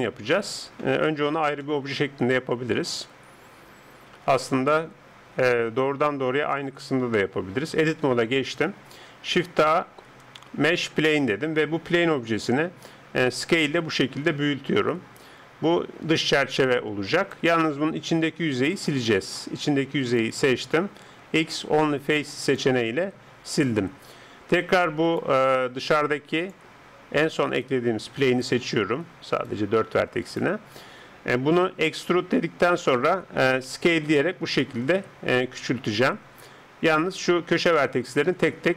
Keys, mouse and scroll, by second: 0.0-1.7 middle drag, 1.7-6.1 drag, 6.1 Tab, 9.1 shift+a, 12.8 s, 18.7-21.3 drag, 20.0 right click, 21.3 x, 25.1 right click, 26.4-28.3 drag, 31.9 e, 33.7 s, 37.6-38.7 middle drag.